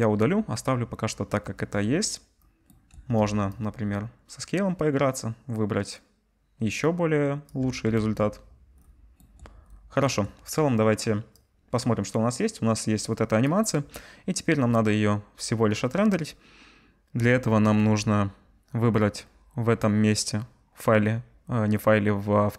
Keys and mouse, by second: 5.6 shift+middle click, 7.3 shift+middle click, 8.0 ctrl+z, 17.2 z.